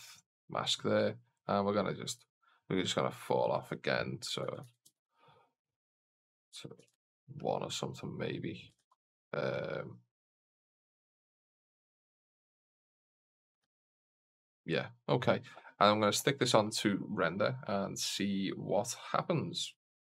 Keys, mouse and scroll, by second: 1.9-7.8 drag, 8.9 shift+z, 12.0 click, 13.9 shift+z, 19.4 click.